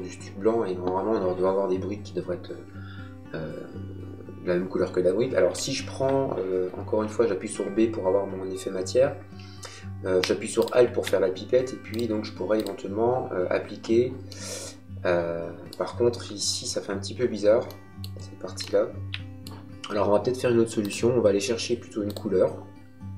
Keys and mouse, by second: 5.4 b, 10.5 alt+click, 14.2 middle click, 17.6 middle click, 20.7 click.